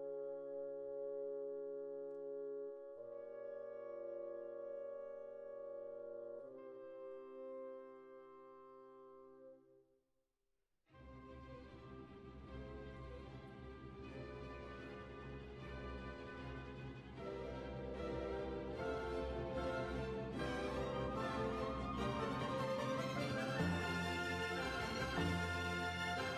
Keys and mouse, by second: 3.5 g, 4.4-5.9 drag, 4.6 g, 5.4 g, 5.9 g, 6.8 g, 7.2 middle click, 8.2 click, 8.2 right click, 9.6 middle click, 10.2 right click, 11.1 click, 13.6 click, 14.5 click, 15.6 click, 17.2 click, 17.3-21.1 right drag, 17.5-21.1 drag, 18.1-26.3 middle drag, 23.6 right click, 24.2-26.3 drag.